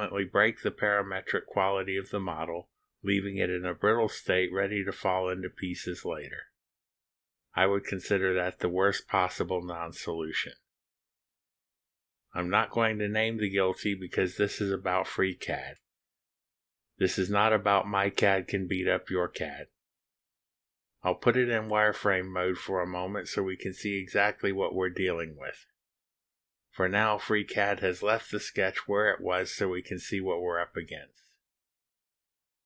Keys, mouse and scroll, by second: 23.5 click, 24.9 click, 28.7 click, 30.2 click, 30.4-31.1 middle drag.